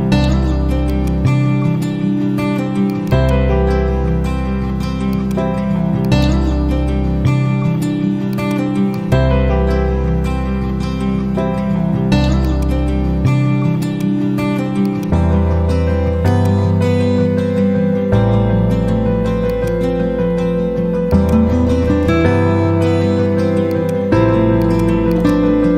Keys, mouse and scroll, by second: 0.2 ctrl+z, 0.8-7.4 drag, 8.1-8.9 typing, 9.7 F6, 10.3 F5, 10.6 F4, 12.3 click, 14.7-18.0 shift+drag, 20.3 F4, 21.0 click, 23.7 click.